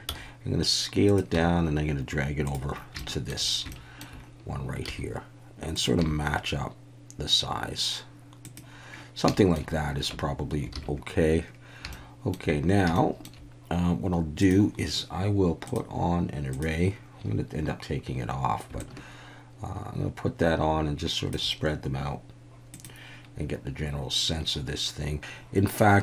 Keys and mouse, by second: 0.1 s, 1.0 click, 1.3 g, 2.4 click, 3.0 shift+middle click, 3.7 shift+middle click, 5.7 click, 6.0 g, 9.3 shift+middle click, 10.1 Tab, 10.7 alt+a, 11.9-12.3 shift+middle drag, 13.0 shift+middle click, 14.4 click, 15.7-16.6 drag, 18.8-21.4 shift+drag, 22.8 click.